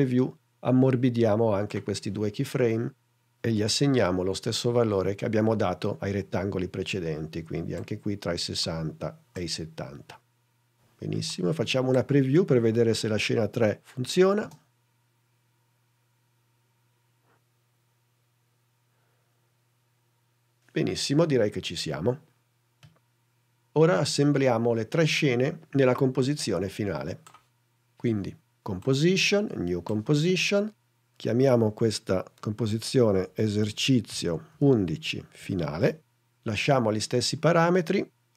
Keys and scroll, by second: 14.7 space, 23.0 space, 32.6-36.3 typing.